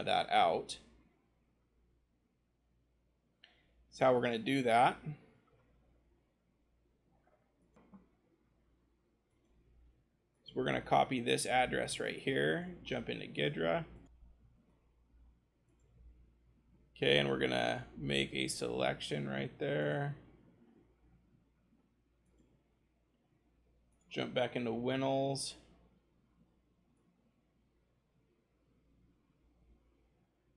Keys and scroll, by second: 6.4 scroll, 11.3 ctrl+shift+c, 14.4 ctrl+g, 24.3-28.3 scroll.